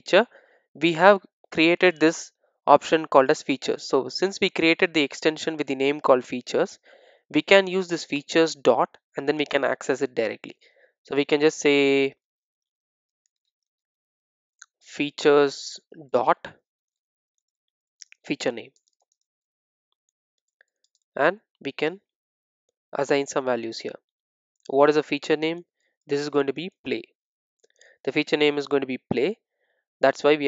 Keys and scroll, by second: 7.9 super+c, 10.6 super+v, 18.8 super+v, 28.7 super+s.